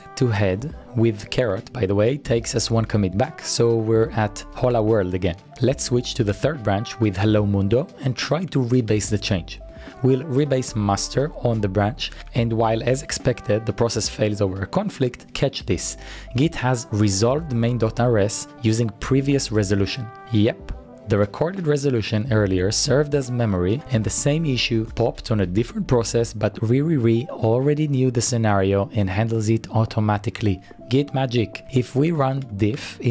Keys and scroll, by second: 1.6 BackSpace, 1.9 shift+6, 4.5 Return, 5.3-6.0 typing, 6.5 Return, 7.9-9.6 typing, 12.2-12.9 typing, 21.3 Return, 21.3 typing, 31.4-33.1 typing.